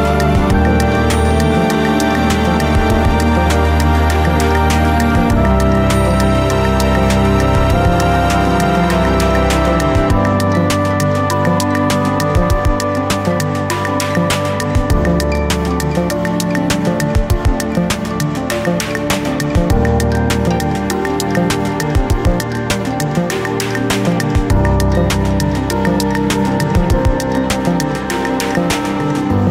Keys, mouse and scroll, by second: 2.4 g, 6.1 click, 6.7 ctrl+r, 7.3 click, 7.7 g, 8.7 click, 8.9-9.2 scroll down 1, 9.2 ctrl+r, 10.4 g, 11.1 click, 11.6 ctrl+r, 12.7 g, 14.1 click, 15.1 scroll up 1, 15.2 shift+middle click, 15.4 alt+click, 17.7 scroll up 1, 18.3 click, 19.1-19.6 scroll down 1, 19.6 r, 20.5 click, 20.9 KP_7, 21.1 scroll down 1, 21.8 scroll up 1, 23.3 click, 23.7 ctrl+r, 25.1 ctrl+r, 26.7 click, 27.1-28.3 scroll up 1, 28.3 KP_1.